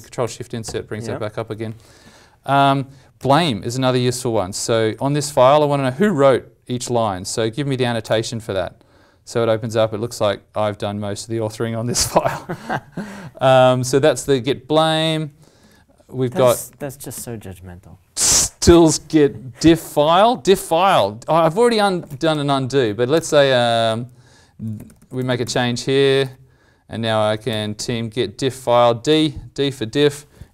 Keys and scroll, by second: 0.2 ctrl+shift+Insert, 1.3 ctrl+Insert, 15.6 ctrl+F4, 16.7 alt+m, 21.7 alt+m, 26.2 ctrl+s, 27.4 alt+m.